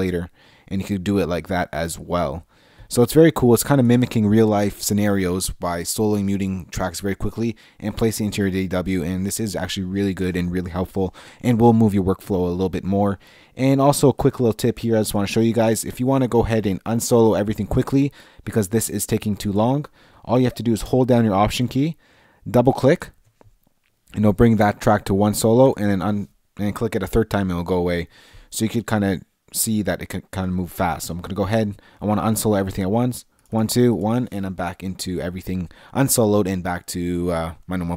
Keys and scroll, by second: 3.8 Left, 14.2 Left, 22.8 Left, 25.7 Left, 28.9 Left, 33.3 Left, 34.5 Left.